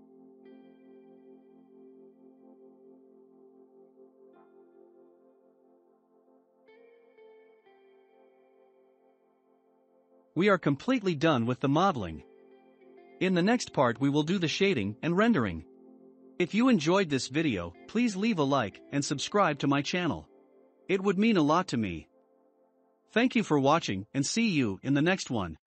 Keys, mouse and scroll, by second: 0.4 click, 1.7 click, 2.3-2.8 scroll down 3, 2.8-5.8 shift+middle drag, 7.1 click, 7.4 scroll up 1, 7.5 middle click, 8.0-8.9 scroll up 2, 8.9-10.0 middle drag, 10.0 click, 10.3-11.3 shift+middle drag, 11.3-11.8 scroll down 2, 11.8-12.8 shift+middle drag, 12.8-14.1 scroll up 1.